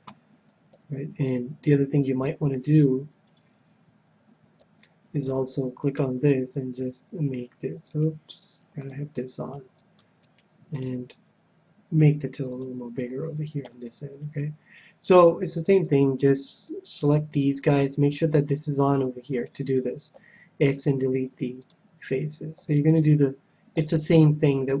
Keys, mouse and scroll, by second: 0.6 a, 1.5 a, 4.5 c, 5.9-7.7 right drag, 6.7 g, 8.1-9.8 right drag, 8.8-10.5 drag, 9.5 c, 10.3-12.1 right drag, 10.8 g, 12.6-14.3 drag, 13.6 a, 15.6 c, 19.5-21.4 right drag, 20.1 x, 22.6 a, 23.0-24.8 middle drag, 23.7 a.